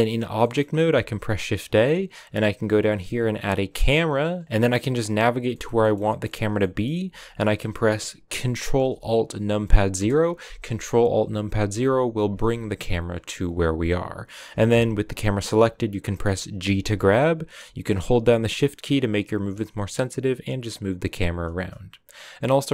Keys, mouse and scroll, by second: 0.3 middle click, 0.8 shift+a, 4.3-4.6 scroll down 2, 4.6 middle click, 5.0-5.4 scroll up 1, 5.4 shift+middle click, 5.9 scroll up 1, 6.0-9.7 middle drag, 9.9 ctrl+alt+KP_0, 12.2 g, 16.5 g.